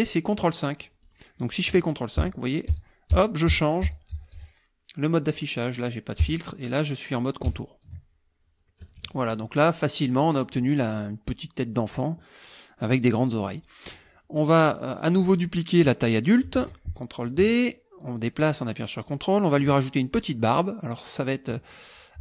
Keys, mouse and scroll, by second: 1.0 click, 2.2 ctrl+KP_5, 5.2 ctrl+KP_5, 6.2 ctrl+KP_5, 7.4 ctrl+KP_5, 8.8 KP_Subtract, 9.6 click, 10.1 click, 13.9 click, 14.6 click, 16.6 ctrl+d, 17.2-19.8 ctrl+drag, 20.0 ctrl+click, 20.6 ctrl+click.